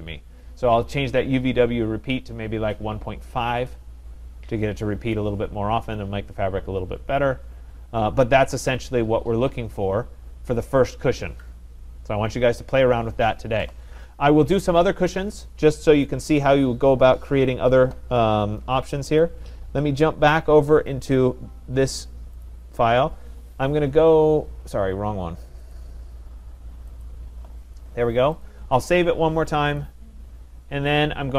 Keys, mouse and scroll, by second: 16.2 click, 19.2 click, 21.1 click, 22.5 click, 25.8 click, 27.1 click, 28.4 click, 29.8 click.